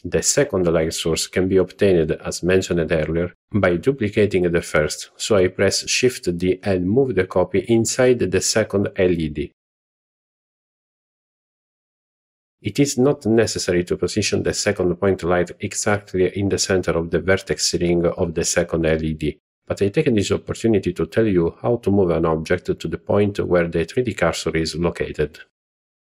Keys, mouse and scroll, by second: 2.2 shift+d, 3.8 click, 4.3 ctrl+z, 6.9 shift+d, 7.2 KP_Enter, 8.5 click, 14.2-14.8 shift+middle drag, 15.0-15.4 middle drag, 15.7-16.3 shift+middle drag, 16.5-17.0 scroll up 1, 17.2-17.5 shift+middle drag, 20.4 middle click.